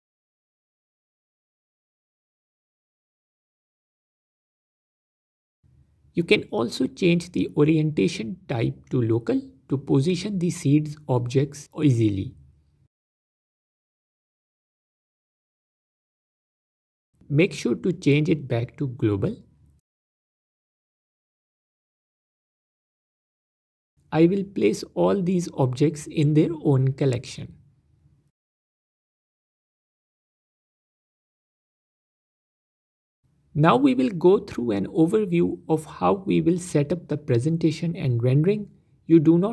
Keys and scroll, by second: 1.4 s, 2.0 alt+d, 2.9 alt+d, 4.1 alt+d, 26.1 m, 30.4 Return.